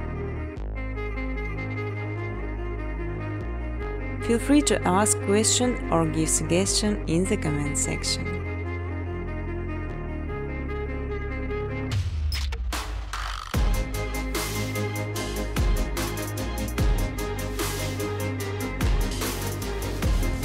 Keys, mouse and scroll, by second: 0.4 click, 0.6 click, 4.8 click, 5.7-6.8 typing, 8.7 click, 8.9 space, 10.6-10.9 typing, 12.8 space, 13.2 space, 15.4 space, 15.9 space, 17.1 space, 19.0 click, 19.7 click.